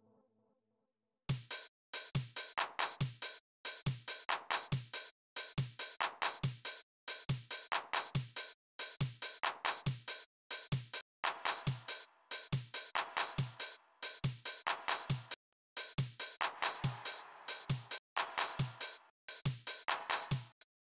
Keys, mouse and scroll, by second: 0.5 click, 2.2 click, 5.8 click, 10.8 click, 15.1 click, 17.7 click, 18.8 click, 20.3 click.